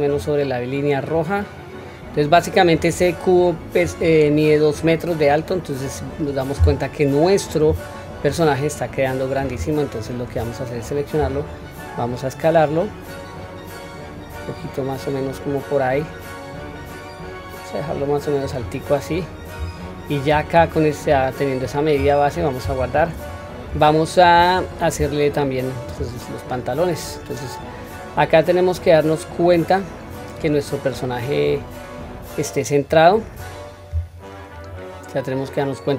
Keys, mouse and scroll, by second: 1.2-2.8 drag, 8.3-9.5 drag, 11.2 s, 19.0-19.5 scroll up 1, 19.8-20.2 shift+middle drag, 19.8-20.2 scroll up 2, 20.5 click, 21.0-21.8 scroll down 1, 21.8 scroll down 1, 22.0-22.3 scroll up 2, 22.8 ctrl+s, 23.3-23.8 scroll down 2, 23.8-24.2 shift+middle drag, 24.6-25.0 scroll up 2, 25.3-25.9 shift+middle drag, 29.1-30.0 scroll down 1, 30.0-30.8 scroll up 1, 30.8-32.0 scroll down 1, 32.0 scroll down 1, 32.8 scroll up 1, 34.5 click.